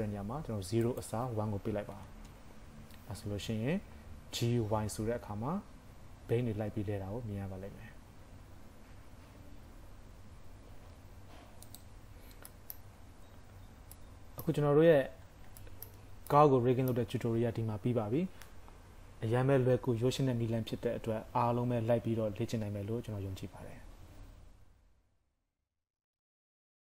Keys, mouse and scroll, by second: 0.9 click, 4.1-4.5 scroll down 1, 4.5 g, 12.0-12.6 scroll down 6, 12.5 middle click, 13.0 KP_5, 13.1-13.5 scroll up 6, 13.6 scroll down 2, 14.0 middle click, 15.0 a, 15.3 scroll down 1, 15.6 shift+middle click, 16.3 middle click.